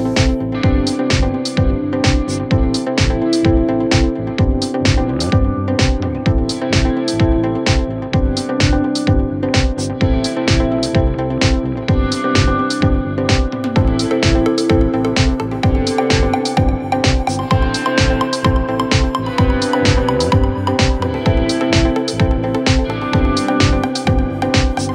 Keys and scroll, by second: 11.0 F3, 19.1 shift+Page_Up, 22.0 c, 23.4 shift+F2, 23.7 Escape.